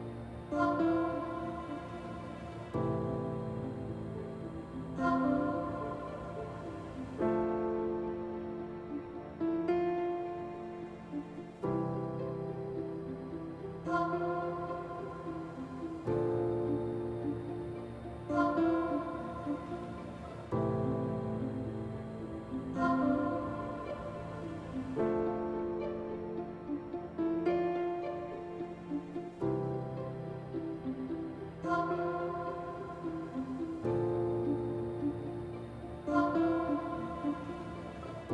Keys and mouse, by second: 0.5 x, 1.9 Tab, 3.4 i, 5.9 click, 6.4 Tab, 7.7 Tab, 9.4 Tab, 11.5-13.8 drag, 17.0 click, 19.4 click, 20.7 middle click, 21.5 Tab, 22.3 q, 23.1 middle click, 24.1-25.8 middle drag, 27.2 click, 28.8 middle click, 31.8-33.3 middle drag, 33.9-35.3 drag, 35.3-37.5 middle drag, 37.6 Tab.